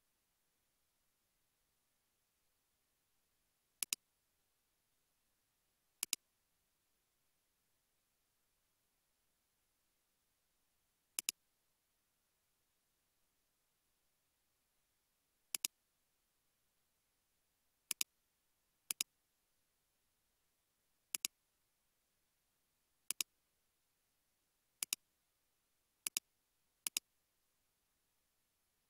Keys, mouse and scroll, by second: 2.8 space, 3.2 space, 5.2 space, 6.5 space, 13.2 space, 13.5 space, 21.8-22.8 scroll up 1.